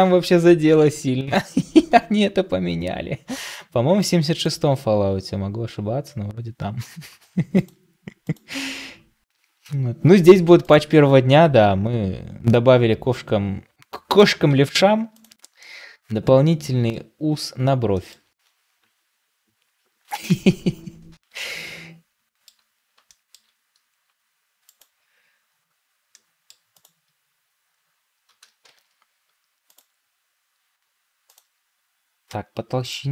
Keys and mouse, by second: 5.7 g, 9.4 r, 11.9 r, 14.4 Tab, 15.0-15.5 drag, 15.5-16.9 middle drag, 17.8 shift+middle click, 21.3-22.4 middle drag, 23.0 shift+middle drag, 26.0-26.4 middle drag.